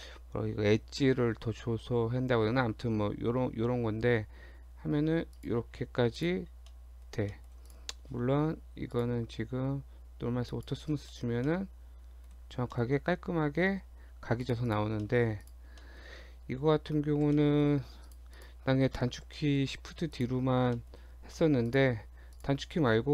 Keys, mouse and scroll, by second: 5.7 scroll down 2, 6.0 Tab, 6.2 click, 6.5 scroll down 1, 6.7 middle click, 7.2 scroll up 1, 7.3 middle click, 7.7 click, 9.0 click, 11.1 middle click, 11.3 scroll up 1, 11.5 middle click, 12.8 middle click, 12.9-13.7 scroll up 3, 13.0 Tab, 13.7-14.3 scroll down 3, 13.9 Tab, 14.4 click, 14.7 click, 15.0 shift+middle click, 15.4 click, 15.8 shift+middle click, 17.3 shift+g, 18.1 click, 18.4 click, 19.3 shift+d, 20.8 shift+middle click, 20.9 shift+scroll up 1, 21.2 Tab, 21.7 click, 22.4 shift+click, 22.7-23.1 scroll up 2.